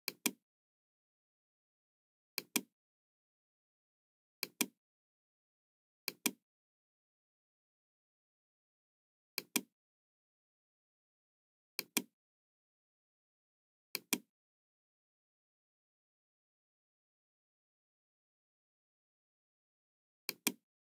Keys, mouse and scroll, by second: 0.0 click, 2.2 click, 3.0-3.3 scroll up 1, 4.3 click, 6.0 click, 6.6-8.2 middle drag, 9.3 click, 11.6 click, 13.8 click, 18.7 KP_1, 18.8 Return, 18.8 KP_0, 20.1 click.